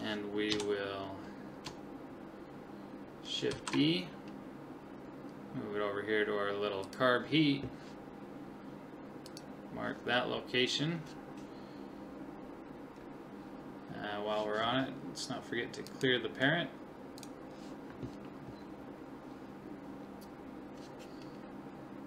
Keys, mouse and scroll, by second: 0.5 KP_7, 3.5 shift+d, 9.3 click, 11.2 click, 15.9 click, 18.9-20.9 middle drag.